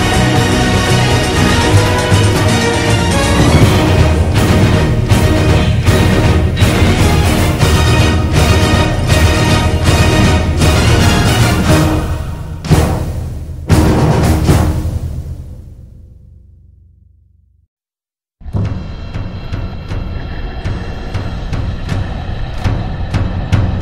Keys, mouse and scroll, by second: 0.0 ctrl+z, 1.1 ctrl+z, 2.8 ctrl+-, 4.0 ctrl+z, 5.8 ctrl+z, 6.7 ctrl+z, 8.2 ctrl+-, 8.4 ctrl+=, 9.9 ctrl+z, 11.2 ctrl+z, 14.9 ctrl+z, 17.7 ctrl+z, 18.5 ctrl+-, 18.6 ctrl+=, 19.8 ctrl+-.